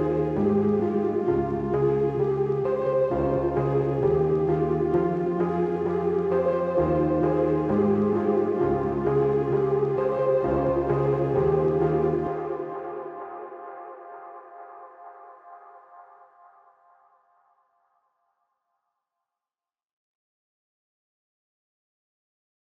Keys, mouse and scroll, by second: 1.6 click, 9.7 click, 10.7 ctrl+2, 11.5 click, 12.7 click, 14.4 ctrl+g, 15.4 click.